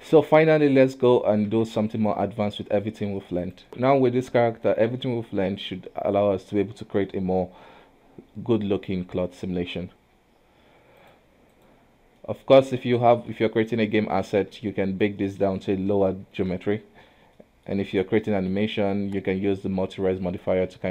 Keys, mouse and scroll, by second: 1.5 a, 1.9 x, 3.6 click, 3.7-4.7 shift+middle drag, 4.7-5.1 scroll down 2, 5.1-5.8 middle drag, 5.8-6.5 scroll up 1, 7.0-8.1 middle drag, 8.1 KP_1, 9.9 click, 11.1-12.3 drag, 12.3 middle drag, 12.6-13.1 scroll up 2, 13.1 shift+middle click, 13.6 scroll down 1, 13.7-14.3 scroll up 1, 14.3 right click, 14.6 KP_1, 14.9-15.3 scroll down 2, 15.3-17.1 middle drag, 17.1-17.4 scroll down 3, 17.4-17.8 middle drag, 17.8-18.3 scroll up 2, 18.3-18.6 middle drag, 18.6-20.1 scroll up 2, 20.1-20.6 scroll down 1, 20.6-20.9 middle drag.